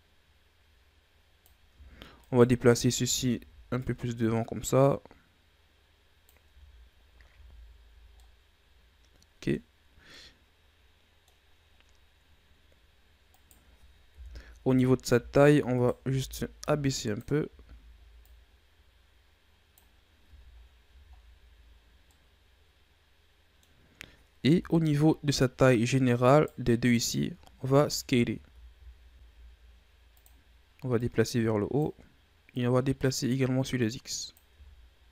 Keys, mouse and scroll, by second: 1.7 Tab, 2.1 right click, 2.5 Tab, 2.9 a, 3.2 a, 3.7-6.4 drag, 6.4 Tab, 7.3 a, 7.5-8.1 scroll down 2, 8.1-11.4 middle drag, 11.4-13.2 scroll up 1, 13.2 right click, 14.1 KP_1, 14.5 Tab, 15.0 z, 15.7 right click, 15.9 b, 17.4 z, 18.1-20.2 drag, 20.2 Tab, 20.5-22.0 scroll down 6, 20.8 a, 22.0-24.4 middle drag, 24.4 KP_1, 25.3-26.2 scroll up 10, 26.2 right click, 26.9 shift+right click, 27.5 Tab, 27.9 a, 28.2 a, 28.6 s, 30.9-34.4 drag, 34.4 Tab, 35.0 a.